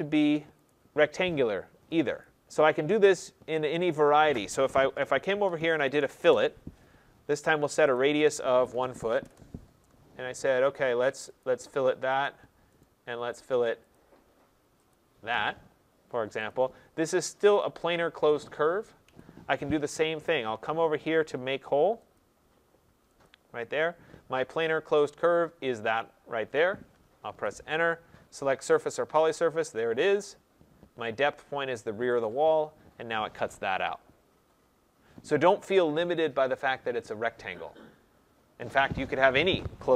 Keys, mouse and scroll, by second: 0.6 click, 2.1 click, 5.4-6.1 typing, 7.8 click, 8.4-9.1 typing, 11.3 click, 12.1 click, 12.7 right click, 13.9 click, 14.8 click, 16.4 click, 17.5 click, 18.9 Escape, 19.6 Escape, 22.1 click, 23.2 click, 25.3 click, 27.2 Return, 28.8 click, 32.1 click.